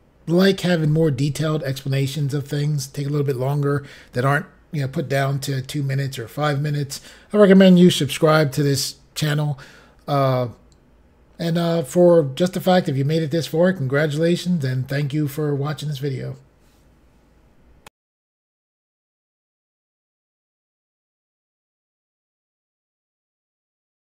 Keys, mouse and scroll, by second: 17.8 Pause.